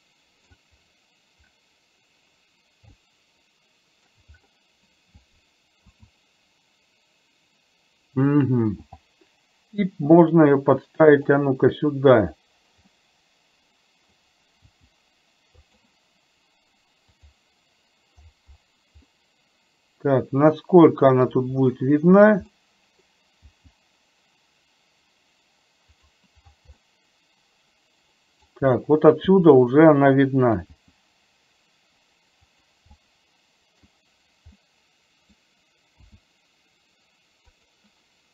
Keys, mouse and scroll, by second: 3.1 shift+scroll up 1, 3.3-4.3 shift+middle drag, 6.0 s, 9.0 g, 13.0 scroll up 1, 13.2-14.2 middle drag, 14.8 g, 19.2-21.5 middle drag, 22.6 middle click, 23.2 scroll down 1, 23.6 g, 27.0-28.6 middle drag, 30.8 g, 33.1 middle click, 34.8-35.6 middle drag, 36.1 s.